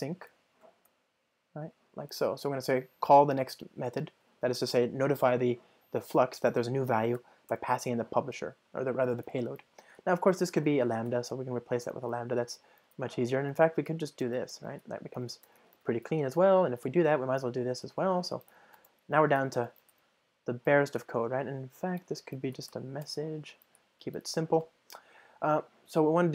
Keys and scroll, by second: 0.7 Return, 7.5 Return, 10.6 alt+Return, 14.5 super+x, 15.2 ctrl+alt+shift+Right, 15.8 super+v, 16.2 super+BackSpace, 19.4 ctrl+alt+shift+Left, 19.9 alt+super+l.